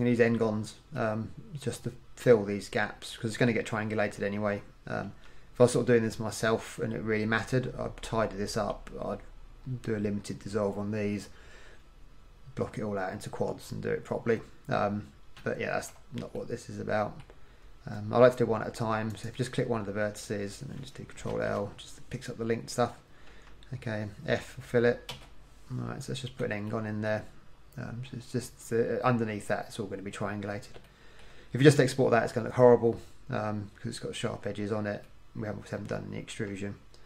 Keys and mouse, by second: 4.2 middle click, 5.2 KP_1, 15.7-17.0 middle drag, 19.2 right click, 21.4 ctrl+l, 23.4 KP_1, 25.2 f, 31.2-33.3 middle drag, 36.4 KP_1.